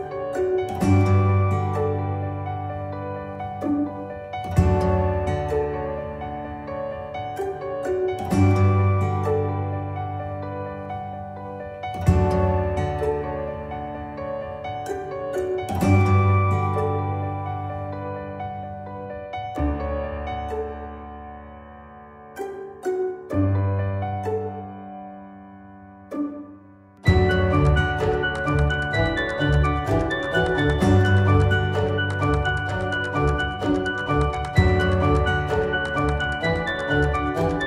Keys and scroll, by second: 1.2 i, 16.7 ctrl+k, 19.2 c, 31.0 d, 36.8 ctrl+z.